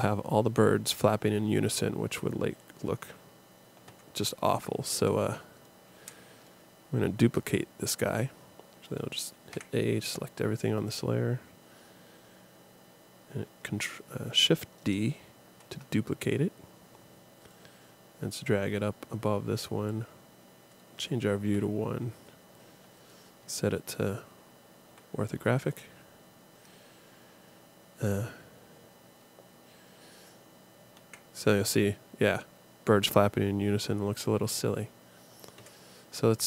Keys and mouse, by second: 3.9 Escape, 9.5 a, 15.5 shift+d, 21.4 KP_1, 24.9 KP_5, 31.0 alt+a, 35.6 Escape.